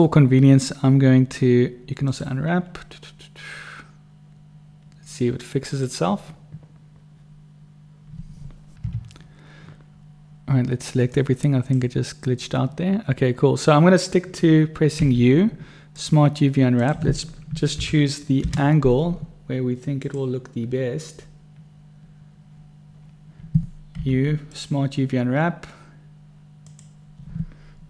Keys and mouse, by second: 11.6 click, 15.3 u, 24.3 u.